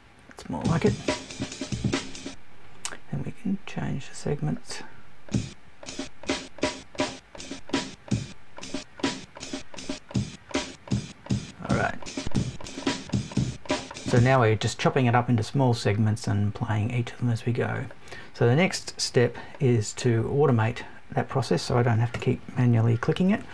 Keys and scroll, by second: 22.1 BackSpace, 23.1 super+BackSpace.